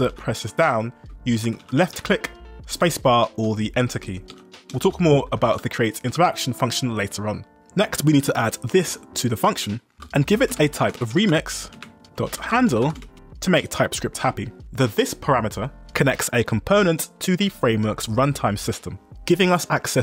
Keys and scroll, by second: 0.1 ctrl+d, 1.2-2.7 typing, 3.5 Escape, 4.3 ctrl+u, 4.8-6.1 typing, 7.6 j, 8.4 ctrl+r, 9.7-13.5 typing, 11.8 Return, 14.9 b, 15.9-16.9 typing, 17.7 ctrl+d.